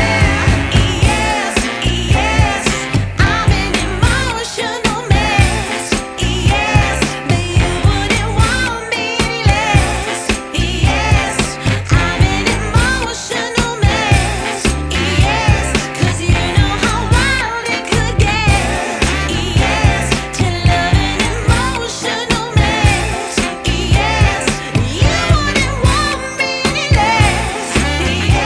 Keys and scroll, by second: 8.0 v, 13.7 e, 19.4 v, 24.3 b.